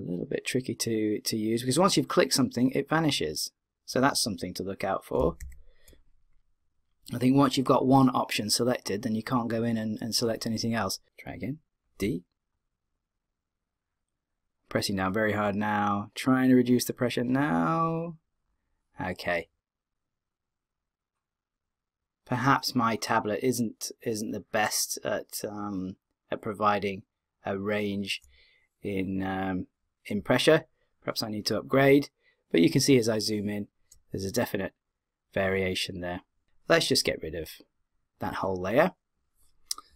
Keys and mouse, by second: 5.2 d, 5.4 w, 8.8 w, 11.0 KP_7, 12.0 d, 12.5-14.3 drag, 12.5 d, 30.5-32.3 middle drag, 37.6 click.